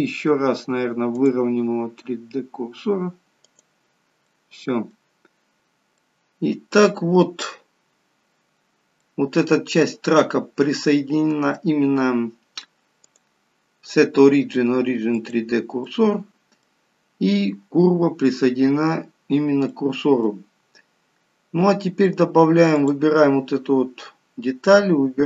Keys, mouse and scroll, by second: 1.2 click, 4.4 middle click, 5.2-5.5 scroll down 2.